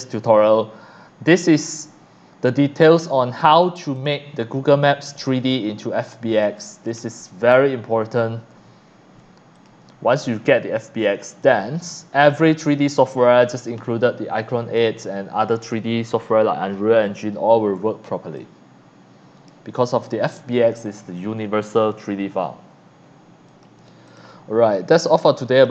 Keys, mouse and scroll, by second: 1.8-3.6 drag, 3.9 click, 6.4 click, 7.7-8.4 ctrl+scroll up 2, 9.6 click, 11.4 click, 12.2 click, 18.4-19.4 drag, 20.0 click, 20.9-21.9 drag, 23.5 click, 24.0 click, 25.5 click.